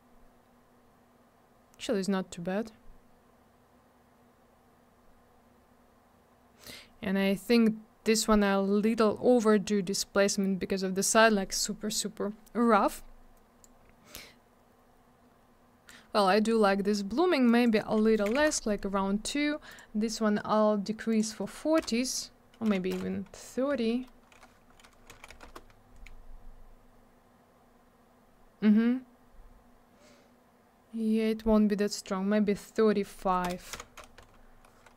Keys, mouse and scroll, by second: 13.6 click, 17.4 click, 18.3 2, 18.4 Return, 19.7 click, 19.7 click, 21.1 click, 21.1 click, 21.8 BackSpace, 22.7 3, 23.7 Tab, 25.1 3, 25.4 Return, 27.3-28.4 scroll up 1, 28.5-29.8 scroll down 1, 32.7 click, 32.7 click, 33.4 BackSpace, 33.7 5, 34.2 Tab.